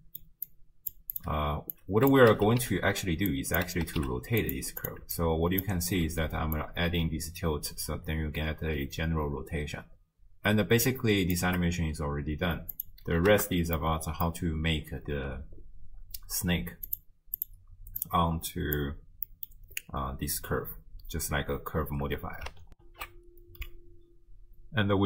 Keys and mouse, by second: 0.5 click, 1.1 click, 1.8-4.9 drag, 2.5 d, 2.6 d, 4.0 d, 5.2 alt+click, 6.6-11.4 shift+drag, 12.7 click, 13.8 middle click, 16.9 click, 18.1-18.8 drag, 19.3 click, 19.3 middle click, 22.8 ctrl+alt+shift+q.